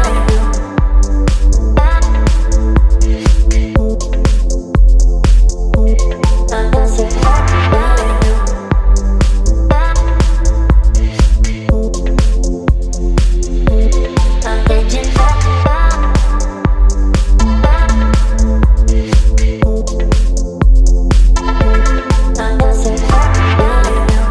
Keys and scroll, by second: 0.6 space, 1.4 b, 8.4 ], 8.5 ], 8.6 ], 12.0 v.